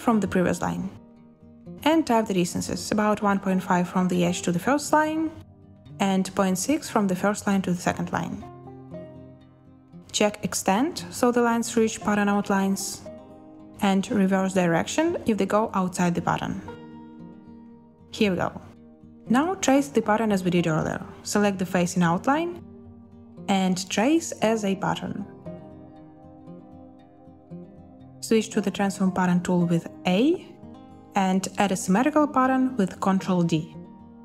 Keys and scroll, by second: 1.9-3.3 typing, 5.1-6.1 typing, 20.3 i, 29.1 a, 31.7 ctrl+d.